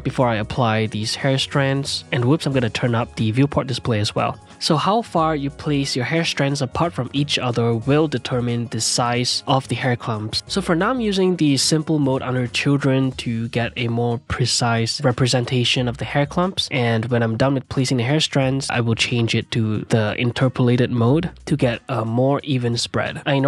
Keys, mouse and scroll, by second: 0.1 ctrl+z, 0.3-2.1 middle drag, 2.1-4.5 drag, 4.5 middle click, 4.6-6.4 drag, 6.4-9.1 middle drag, 9.1 click, 9.3-10.2 middle drag, 10.2 click, 11.1-11.9 middle drag, 11.9-16.7 shift+drag, 16.7-18.5 middle drag, 18.5 click, 19.5 ctrl+middle click, 19.9 shift+click, 20.2 ctrl+z, 20.6 shift+click, 21.7 click, 22.3 ctrl+Tab, 23.0 ctrl+middle click, 23.2-23.4 drag.